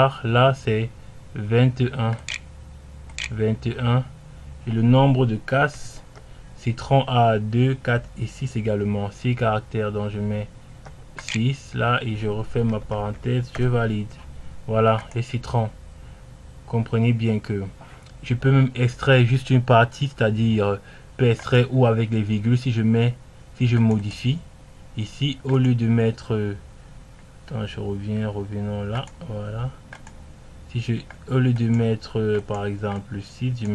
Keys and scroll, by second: 0.8-2.8 typing, 4.3 2, 6.5 e, 6.8 r, 9.0-9.9 typing, 11.1 6, 11.5 j.